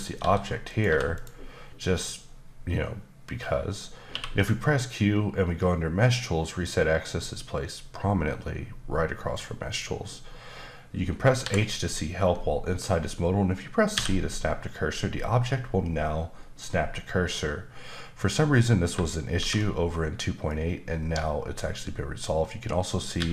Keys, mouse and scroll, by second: 0.2 s, 0.6 click, 0.8 g, 1.1 click, 4.1 q, 9.3 click, 11.4 h, 13.9 c, 19.3 shift+c, 23.2 x.